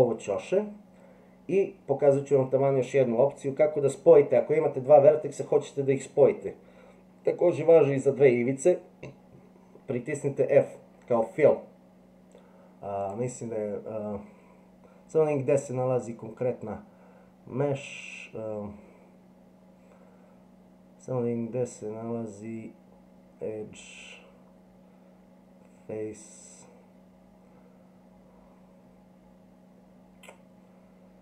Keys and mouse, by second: 13.0-31.2 drag.